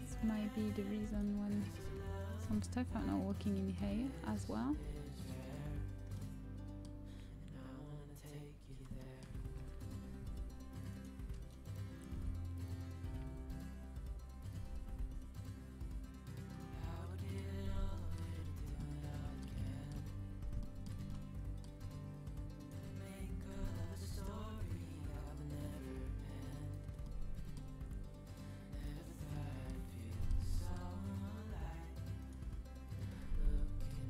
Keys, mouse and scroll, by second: 2.0-3.6 middle drag, 5.7 middle click, 6.4-7.6 middle drag, 7.7-12.7 middle drag, 12.1 g, 16.0 g, 18.0-19.1 middle drag, 19.7-21.3 middle drag, 22.5-25.7 right drag, 24.2 g, 27.7 g, 33.2 middle click.